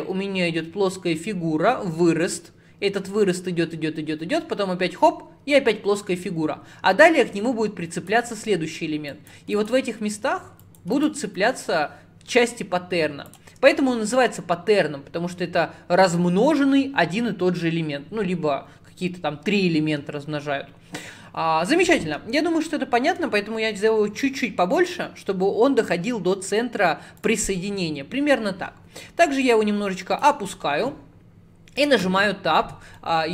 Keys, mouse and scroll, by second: 29.5 click, 31.8 Tab, 32.8 Tab, 33.0 middle click.